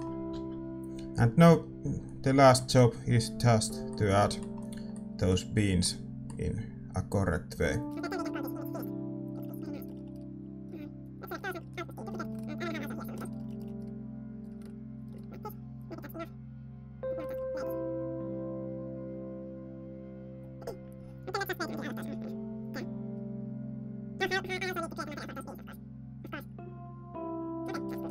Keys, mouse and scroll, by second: 0.3 alt+a, 3.1 alt+a, 3.9-7.7 middle drag, 7.8 alt+a, 7.8 click, 8.0 ctrl+s, 8.0 middle click, 8.2 alt+a, 8.9 alt+a, 8.9 click, 9.3-11.1 middle drag, 11.1 b, 11.2 middle click, 11.9 alt+d, 11.9 click, 12.5 middle click, 12.5 g, 13.1 KP_0, 13.3 middle click, 13.9 alt+d, 13.9-17.0 drag, 14.5 alt+d, 14.5 g, 17.0 scroll down 1, 17.2-28.1 middle drag, 27.7 alt+a.